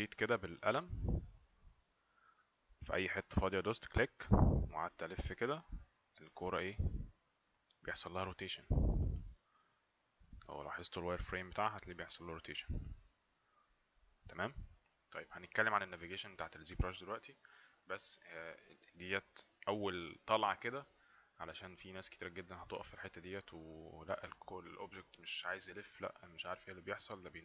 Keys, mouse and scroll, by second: 3.6 click.